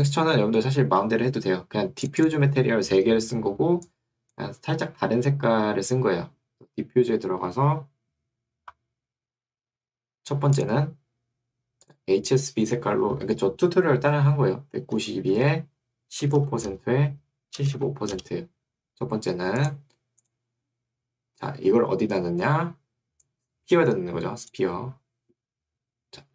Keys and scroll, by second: 13.0 1, 14.8 9, 15.4 Tab, 16.0-18.3 typing.